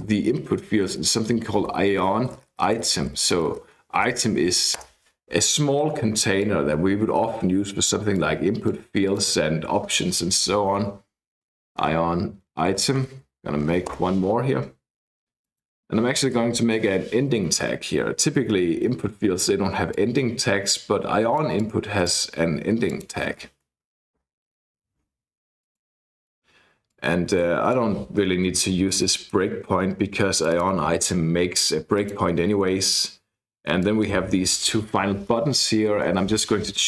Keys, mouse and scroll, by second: 0.0-4.9 typing, 6.4-9.0 drag, 9.1 click, 10.5-13.8 typing, 13.9 Return, 15.4 click, 16.1 shift+,, 16.6 shift+/, 19.9-22.2 drag, 22.9 click, 23.4 <, 24.2 shift+/, 25.6 click, 26.9-28.1 drag, 29.0 BackSpace, 29.4 BackSpace, 30.3 click, 32.0 click, 33.8 click, 35.2 Left, 35.5-36.6 typing.